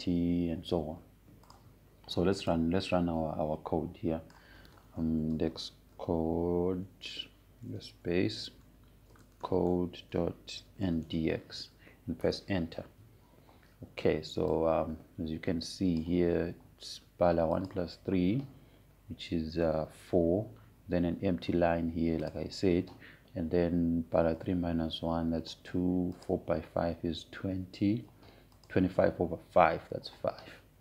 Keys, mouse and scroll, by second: 0.0-7.0 drag, 6.8-9.3 typing, 10.4-13.3 typing, 13.8 Return, 16.1-19.3 drag, 23.9 click, 27.9 click, 30.3 click.